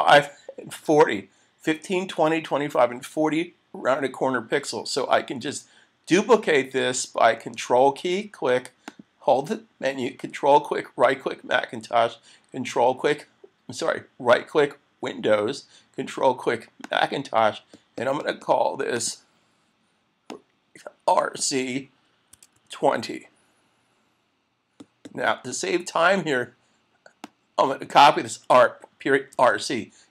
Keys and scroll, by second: 29.3 super+c.